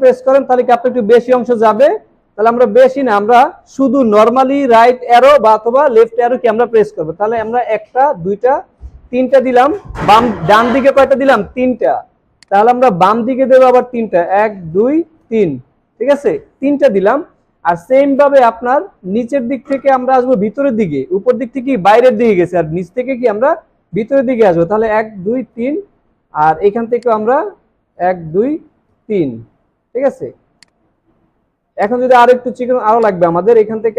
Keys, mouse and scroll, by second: 2.7 shift+Left, 8.2 Right, 14.7 Left, 21.7 alt+scroll up 1, 25.2 click, 27.9 right click, 28.3 right click, 31.7-32.1 alt+scroll down 1, 32.3 alt+scroll up 2.